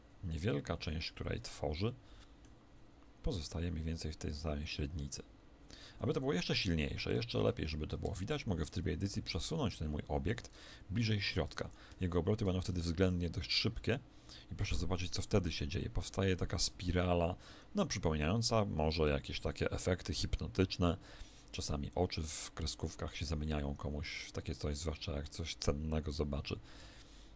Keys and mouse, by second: 5.5 Escape, 6.3 middle click, 7.0 KP_1, 7.9 Tab, 9.0 click, 11.3 Tab, 11.9 middle click, 12.7 alt+a, 20.7-27.3 middle drag.